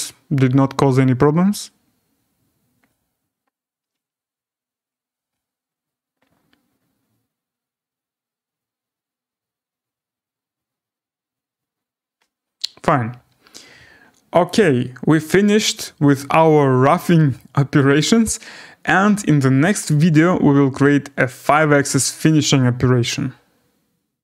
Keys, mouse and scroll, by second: 14.4 click, 15.2 scroll, 17.3 right click, 17.8 middle click, 18.0 scroll.